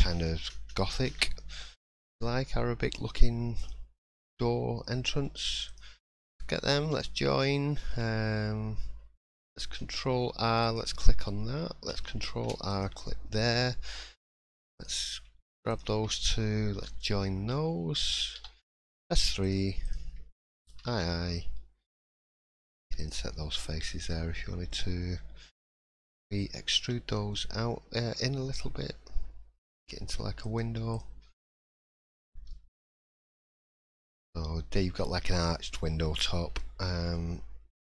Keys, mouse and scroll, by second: 1.1 1, 3.6 click, 4.2 middle click, 5.6 shift+click, 6.8 j, 7.2 middle click, 9.3 ctrl+r, 12.3 ctrl+r, 14.7 click, 15.7 shift+click, 16.7 j, 17.2 middle click, 18.3 3, 18.9 click, 19.4 shift+click, 20.7 i, 23.3 middle click, 30.9 click, 31.2 scroll down 4, 31.5 middle click, 32.0-32.4 scroll up 2, 32.5 shift+middle click, 32.8 scroll up 2, 33.0 middle click, 33.6 scroll down 1, 33.9 middle click, 35.5 middle click, 35.9 scroll up 2, 36.3 shift+middle click, 36.8 middle click.